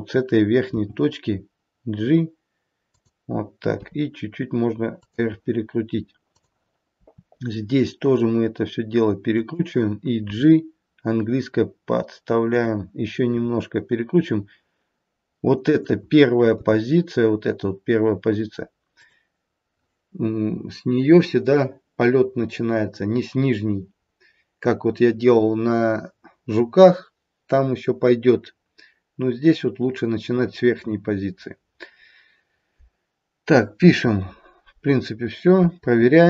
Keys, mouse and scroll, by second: 0.8 g, 3.8 r, 6.1 click, 6.9 r, 10.3 g, 13.3 r, 16.4 g.